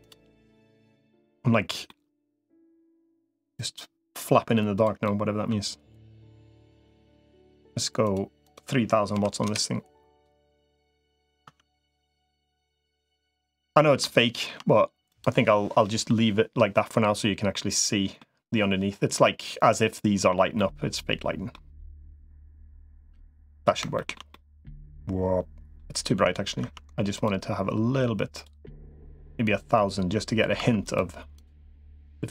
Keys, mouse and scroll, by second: 0.8 click, 1.8 middle click, 3.4-4.6 drag, 4.9 middle click, 5.8-7.1 middle drag, 8.0-9.4 drag, 10.3 middle click, 11.2 Tab, 12.0 middle click, 14.0 shift+middle click, 15.0 click, 15.7 middle click, 16.5-18.0 middle drag, 19.1 middle click, 20.4 middle click, 21.6-23.4 middle drag, 23.7 shift+middle click, 24.1-25.6 middle drag, 26.0 Tab, 26.4 Tab, 28.4-30.8 drag, 31.6-32.3 middle drag.